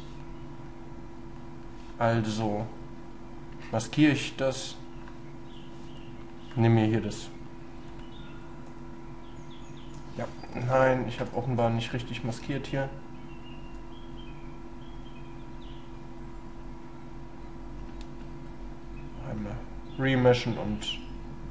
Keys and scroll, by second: 10.6 ctrl+z, 11.6 ctrl+y.